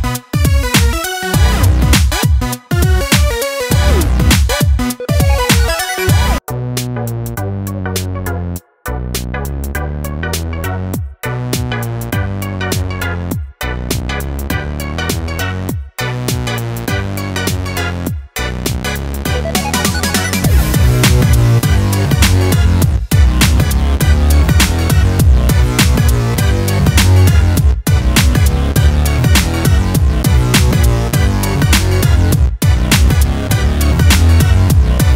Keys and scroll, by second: 6.6 ctrl+t.